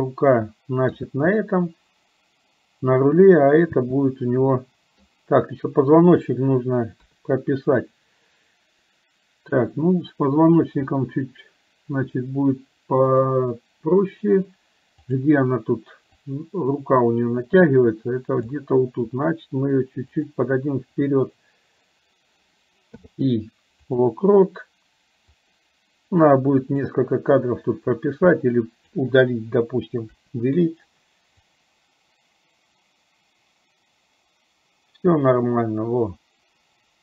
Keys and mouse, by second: 1.1 space, 3.8 space, 4.7 middle click, 7.1 KP_3, 13.2 click, 15.2 click, 16.3-18.7 drag, 25.4-27.1 drag, 27.8-29.1 drag, 30.2 Delete, 31.6-37.0 drag.